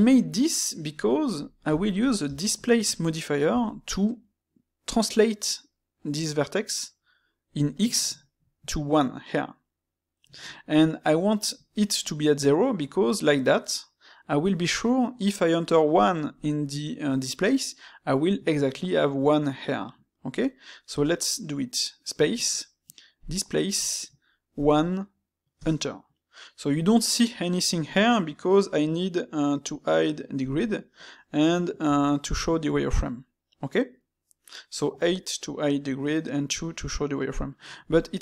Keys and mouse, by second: 1.4 ctrl+middle click, 2.1 space, 20.9 space.